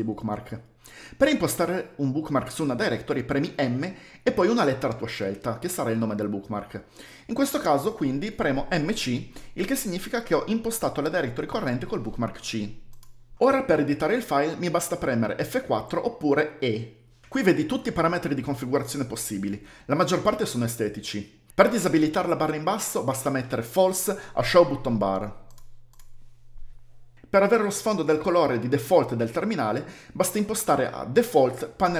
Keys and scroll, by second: 8.7-9.2 typing, 16.4-17.0 typing, 21.7-31.5 typing.